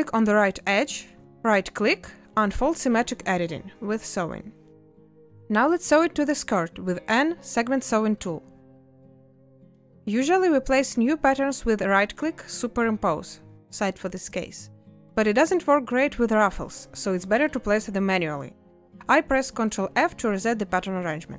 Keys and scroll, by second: 4.8 a, 7.1 n, 10.3 a.